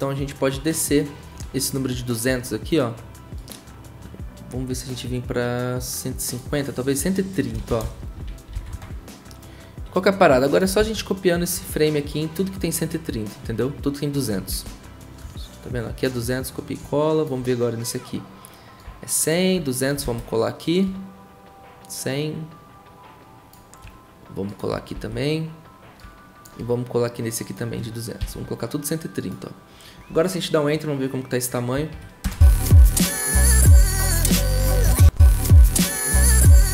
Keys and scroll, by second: 0.0-0.3 typing, 7.3-8.7 typing, 10.8 ctrl+c, 14.5 ctrl+v, 20.0 ctrl+v, 24.9 ctrl+v, 28.2 ctrl+v, 32.2 typing, 34.9 0.